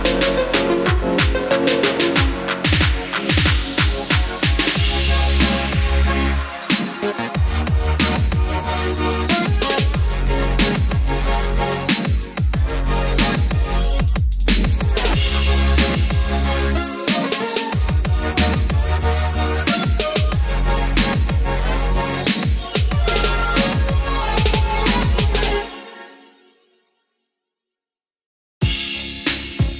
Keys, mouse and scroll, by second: 0.2 KP_4, 0.9 KP_4, 3.1 click, 5.3 scroll down 1, 7.0-11.2 drag, 11.8 scroll up 1, 14.3 click, 16.8-17.5 scroll down 1, 17.5-22.2 drag, 23.0 Up, 26.6-29.7 drag.